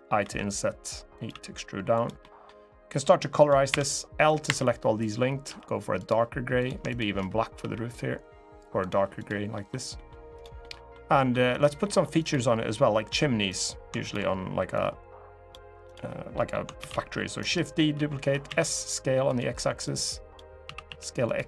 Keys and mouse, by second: 0.9 click, 1.0 e, 1.7 click, 1.9 middle click, 3.4 l, 4.2 l, 5.2 g, 5.7 click, 7.3 g, 8.5 click, 8.9 click, 9.3 middle click, 9.7 middle click, 10.3 middle click, 10.9 middle click, 11.2 click, 11.5 middle click, 11.9 click, 13.2 click, 13.7 shift+click, 14.5 click, 16.1 middle click, 16.5 shift+d, 17.1 right click, 17.7 s, 18.2 x, 19.0 click, 19.6 click, 20.4 s, 20.6 x, 21.0 click.